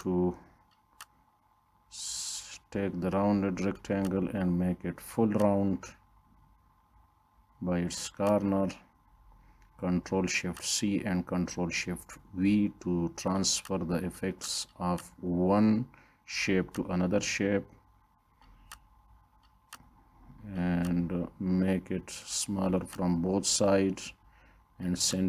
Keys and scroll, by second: 9.4 ctrl+shift+c, 11.5 ctrl+shift+v, 17.9 ctrl+d.